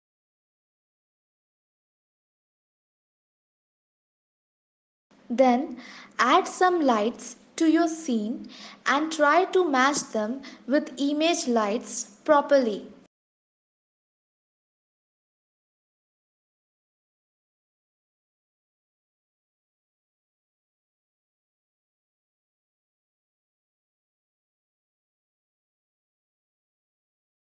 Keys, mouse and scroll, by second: 2.5 click, 4.8-5.4 scroll up 1, 7.6 shift+a, 10.6 s, 11.4 g, 14.8 click, 15.6 KP_0, 16.5 click, 16.9 g, 20.4-21.2 typing, 22.7 click, 23.5 shift+middle click, 25.0 shift+d, 25.8 click, 26.2 g, 26.3 s.